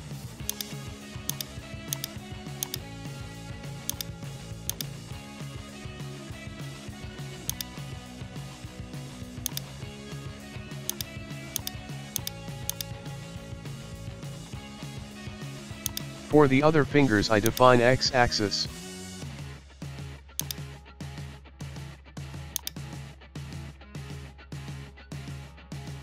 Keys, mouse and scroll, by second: 0.1 shift+middle click, 0.5 shift+click, 1.3 shift+click, 1.9 shift+click, 2.6 shift+click, 3.2-3.6 scroll down 1, 3.6 g, 4.7-6.2 drag, 8.4-9.5 middle drag, 9.5 click, 10.5-10.9 scroll up 1, 10.9 shift+click, 11.5 shift+click, 12.2 shift+click, 12.7 shift+click, 13.3 scroll down 1, 13.9-14.9 middle drag, 14.9 scroll down 1, 15.1 middle click, 15.8 ctrl+click, 17.0 scroll down 1, 17.1 shift+middle click, 17.5 ctrl+click, 18.2 middle click, 18.7 scroll up 2, 18.9-19.2 middle drag, 19.2-20.0 scroll up 2, 20.0-20.4 scroll up 1, 20.4-21.9 drag, 23.4 KP_1, 23.7 scroll up 1, 23.8 Tab, 24.2 shift+middle drag, 24.4-25.0 scroll up 1, 25.0-26.0 middle drag.